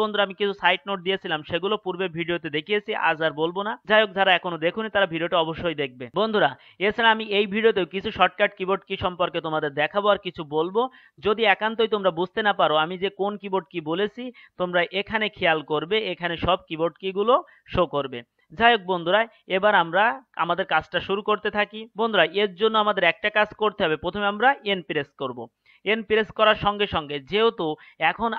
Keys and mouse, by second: 25.0 n.